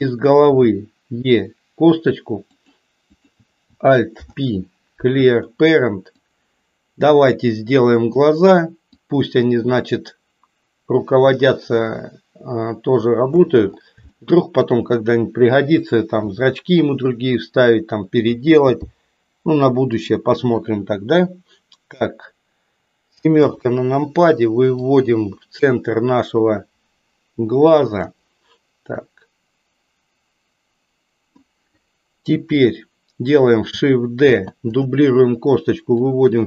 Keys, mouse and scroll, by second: 0.5 e, 3.0 click, 4.0 alt+p, 6.1-8.2 drag, 9.2-13.4 drag, 14.3 shift+middle click, 16.3 s, 18.5 g, 23.3 KP_7, 24.9-27.9 drag, 28.9 click, 29.3-31.3 drag, 34.1 shift+d, 36.1-36.4 drag.